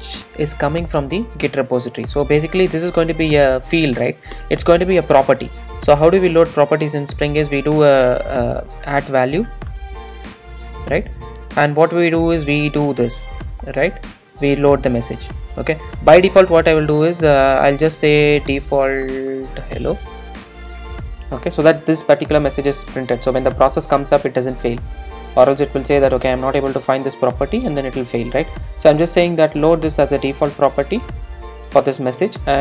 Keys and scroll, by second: 0.1 Return, 9.9 Return, 20.6 super+s.